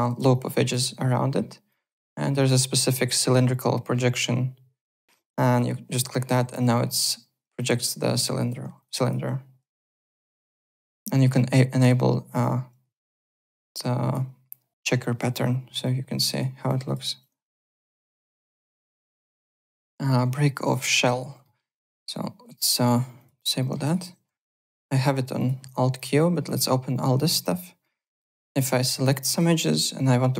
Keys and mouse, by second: 0.1 z, 0.3 alt+click, 1.7 click, 2.4 click, 5.5 click, 6.3 w, 6.7 click, 7.5 click, 8.3 alt+click, 8.8 click, 10.0 click, 10.5 click, 12.3 click, 12.9 alt+click, 14.7 alt+right click, 15.0 alt+click, 15.8 click, 16.6 click, 17.0 r, 17.2 click, 18.0 w, 18.6 alt+click, 19.3 alt+Tab, 19.7 alt+click, 20.9 alt+middle click, 21.1 alt+right click, 21.4 alt+middle click, 23.2 click, 23.6 alt+middle click, 23.8 alt+right click, 23.8-24.7 typing, 24.3 click, 25.3 click, 27.8 middle click, 27.8-28.7 typing, 28.3 click, 29.8 click.